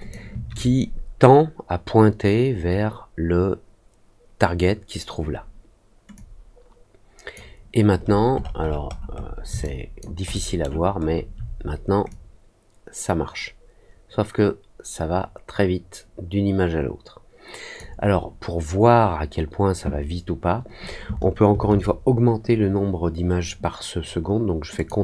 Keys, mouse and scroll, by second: 6.1-7.3 drag, 8.0-8.5 scroll up 2, 8.5-9.3 scroll down 3, 9.6 alt+click, 10.3 alt+middle click, 10.9 alt+scroll down 1, 12.0-17.7 drag, 24.7 click.